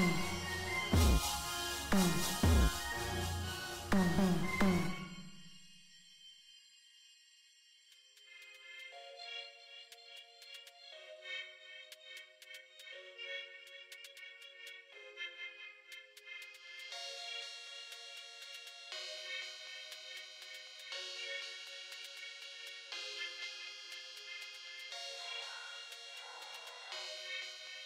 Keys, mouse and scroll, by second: 1.0 click, 8.1 right click, 9.0 click, 16.1-17.3 drag, 19.0-20.3 drag, 20.9 click, 27.5 click.